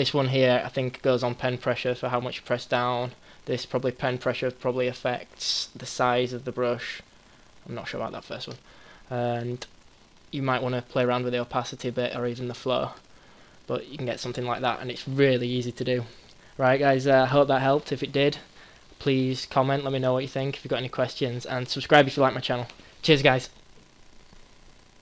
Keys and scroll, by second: 9.8 ctrl+z.